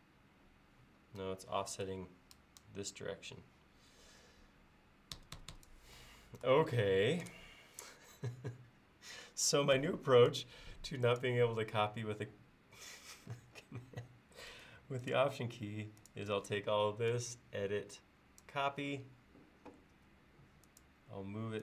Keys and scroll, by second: 5.2 Escape, 5.4 typing, 9.8 space, 20.0 m.